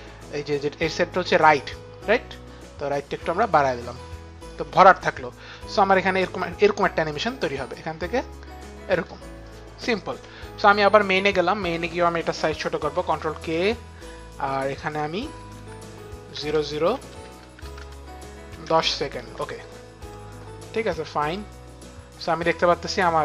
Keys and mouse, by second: 2.2 click, 5.4 click, 9.3 click, 11.1 click, 12.9 ctrl+k, 12.9 click, 14.7 click, 15.2-17.3 typing, 16.5 Right, 17.0 Right, 18.4 KP_1, 18.5 KP_0, 19.1 Return, 20.5 click, 22.9 click.